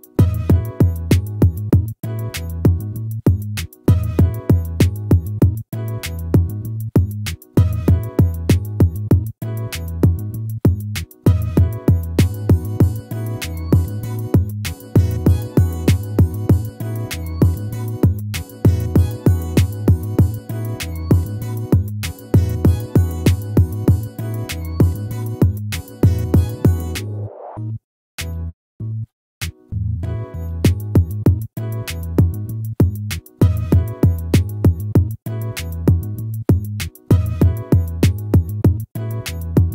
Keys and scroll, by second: 8.9 ctrl+-, 11.4 ctrl++, 17.4 ctrl+-, 19.8 ctrl++, 22.0 ctrl++, 25.8 ctrl+-, 33.0 ctrl+z.